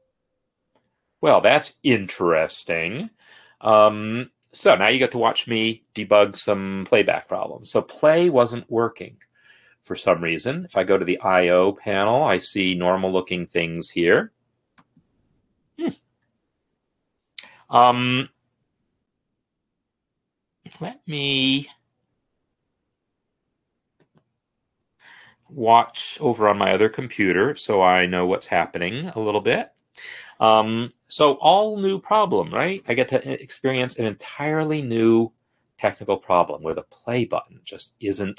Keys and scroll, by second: 3.4 alt+e, 3.8 Up, 4.1 Return, 35.0 space.